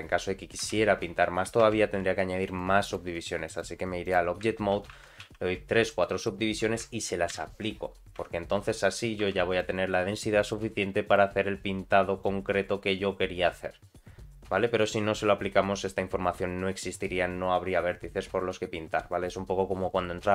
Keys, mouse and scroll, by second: 0.6 Tab, 1.6 Tab, 2.5 click, 3.5 click, 4.7 ctrl+2, 4.9 ctrl+3, 5.2 ctrl+4, 5.9 middle click, 7.4 ctrl+a, 8.2 Tab, 9.2 3, 9.5 click, 10.4-20.3 drag.